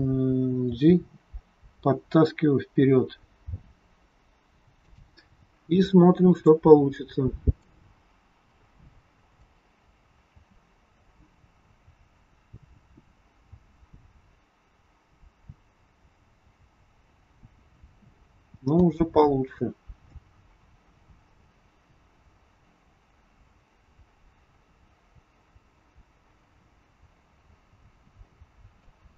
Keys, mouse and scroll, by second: 0.8 g, 5.8 click, 7.7 click, 7.9 scroll up 2, 9.2 click, 9.2-9.5 scroll up 1, 9.8 scroll down 2, 10.3 scroll down 1, 10.3 space, 17.8 space, 18.8 space, 27.6 space, 28.8 click.